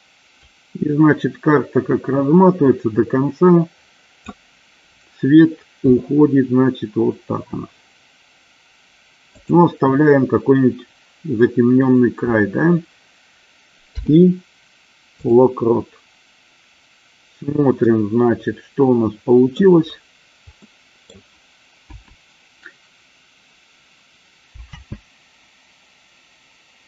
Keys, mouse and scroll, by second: 0.9-4.7 drag, 6.1 r, 9.7 click, 14.0 i, 18.1-19.9 middle drag, 20.9 middle click, 22.1 KP_0, 25.0 space.